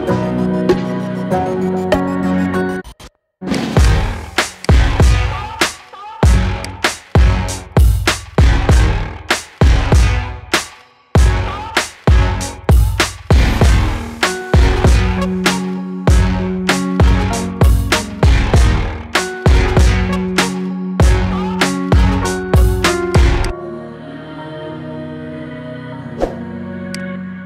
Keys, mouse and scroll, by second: 3.3 click, 3.6 click, 4.4-5.5 drag, 5.5 KP_0, 5.7 KP_0, 6.5-7.7 drag, 7.7 KP_0, 10.3-11.1 scroll up 1, 11.1-14.2 shift+middle drag, 15.5-16.8 scroll up 1, 16.8-18.0 middle drag, 18.0-19.5 scroll up 1, 19.5-22.0 scroll down 1, 22.0 n, 24.7-26.3 scroll down 3, 26.3-26.7 scroll down 1, 26.7-27.4 drag.